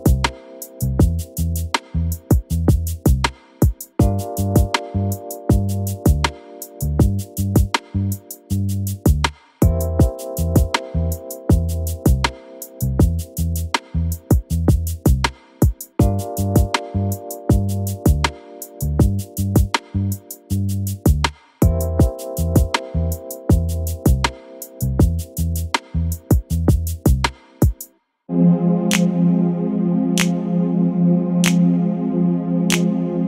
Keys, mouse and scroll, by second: 0.0 click, 0.5-1.2 scroll up 6, 1.2 click, 1.6 KP_3, 2.0 click, 2.7 g, 4.0 click, 4.4 g, 7.1 click, 8.9 l, 9.4-10.0 scroll up 1, 10.3 g, 11.7 scroll up 2, 12.6 click, 13.6-13.9 scroll up 3, 13.9 click, 14.5 g, 15.1 click, 15.5 g, 16.5-17.0 scroll down 1, 17.0 click, 17.7 click, 18.1-18.6 scroll up 1, 18.6 g, 20.4 KP_1, 20.5-20.8 scroll down 9, 21.1 click, 22.2 click, 22.9 l, 23.1 KP_1, 23.4 scroll down 2, 23.7-24.2 scroll up 1, 24.6 g, 26.2 click, 26.4 g, 28.1 click, 28.4-28.9 scroll up 6, 28.9 click, 29.4-30.3 scroll up 4, 30.3 g, 30.9-31.6 scroll down 7, 31.8 shift+d.